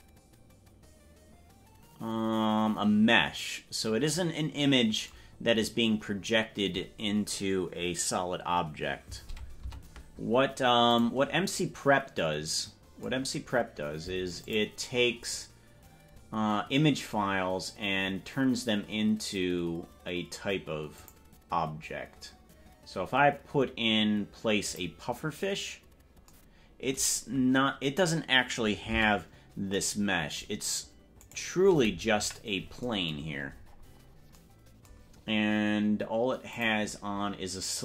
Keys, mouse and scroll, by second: 5.6-6.0 scroll down 3, 5.8 scroll up 1, 6.2 scroll down 1, 9.8 Tab, 10.9 click, 14.4 click, 15.8-16.4 scroll down 11, 16.8-17.4 scroll down 10, 18.0-18.4 scroll down 8, 21.2 click, 24.6-25.7 drag, 29.1 Tab, 31.3 right click, 32.3 KP_Decimal, 33.3 scroll down 4, 33.5-33.9 scroll down 4, 33.7 scroll up 2, 33.9-34.5 scroll down 12, 35.1-35.5 scroll up 3, 36.5 click.